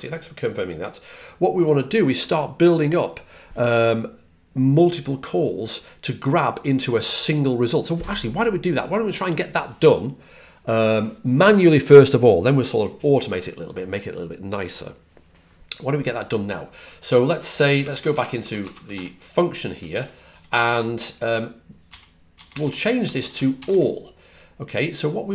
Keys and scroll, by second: 18.5-20.1 typing, 21.5-24.0 typing.